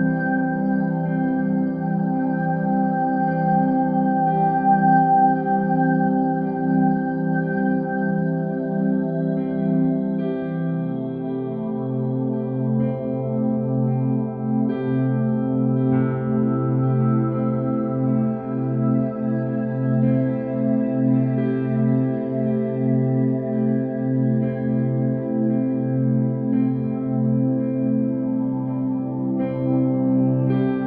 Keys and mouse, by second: 0.9 click, 1.6 shift+click, 2.6 KP_3, 3.8 shift+d, 7.4 ctrl+r, 8.6 shift+r, 9.6-10.9 middle drag, 12.9 KP_1, 13.7 r, 16.0 shift+middle drag, 17.4 g, 21.2 middle click, 22.3 g, 23.8 click, 26.0 g, 27.5 click, 28.3-30.8 middle drag.